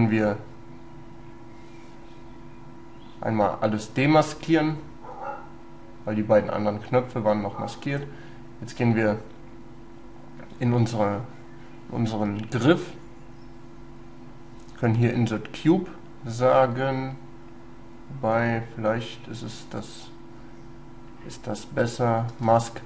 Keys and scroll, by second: 22.4 space.